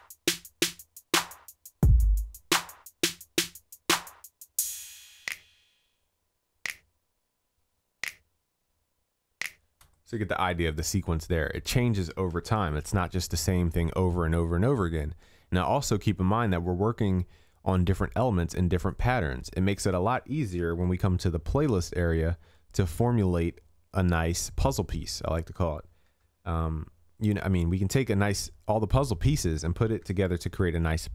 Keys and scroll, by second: 10.6 ctrl+s, 20.8 ctrl+s, 26.3 ctrl+s, 30.1 ctrl+s.